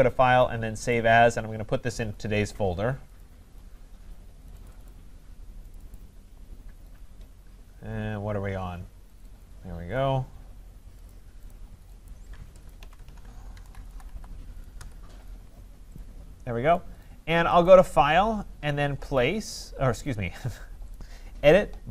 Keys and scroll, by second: 14.7 Return.